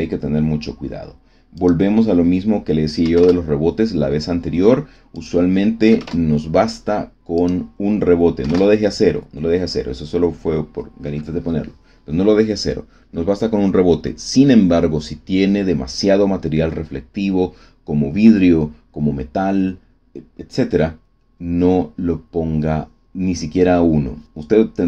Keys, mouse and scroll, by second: 1.5 click, 3.0 KP_1, 3.1 KP_Enter, 5.1 click, 5.8 KP_0, 5.9 KP_Enter, 7.3 click, 8.4 KP_1, 8.5 KP_Enter.